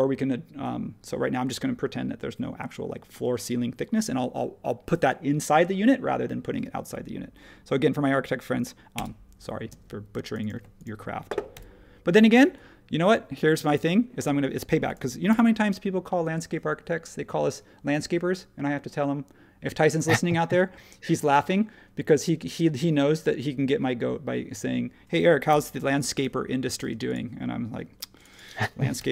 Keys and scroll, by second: 8.9 Return, 9.6 space, 11.5 p, 13.8 space, 15.3 h, 25.5 h, 26.8 space, 29.0 p.